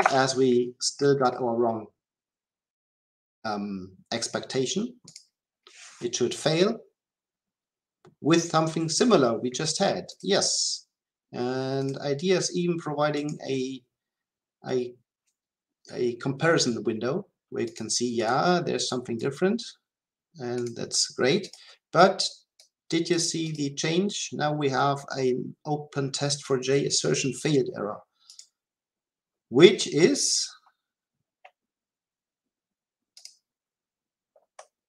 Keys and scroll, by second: 5.1 shift+F10.